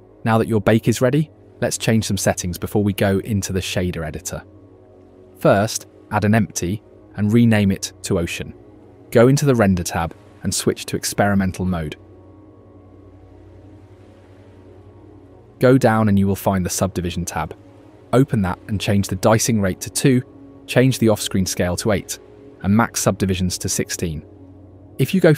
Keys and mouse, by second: 4.4 shift+a, 6.1 Down, 7.4 F2, 11.9-14.0 drag, 17.7 click, 19.4 middle click, 21.3 middle click, 22.6-24.1 middle drag.